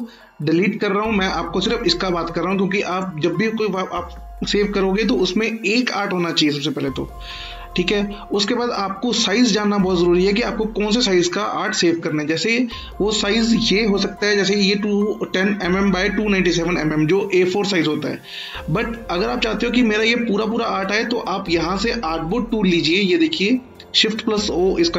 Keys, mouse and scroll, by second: 0.5 Delete, 1.3-1.9 click, 6.2-7.5 scroll up 1, 7.5-8.9 scroll down 1, 8.9-10.6 alt+scroll down 2, 13.1-13.6 scroll down 1, 13.6 click.